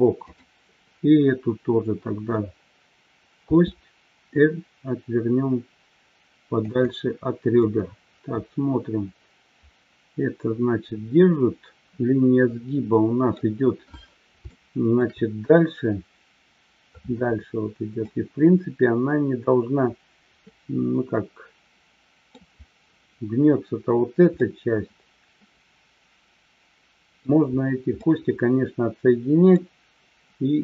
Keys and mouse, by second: 7.6-13.4 middle drag, 14.7 shift+middle click, 18.0-22.4 middle drag, 24.4-27.2 middle drag, 28.0-29.5 middle drag.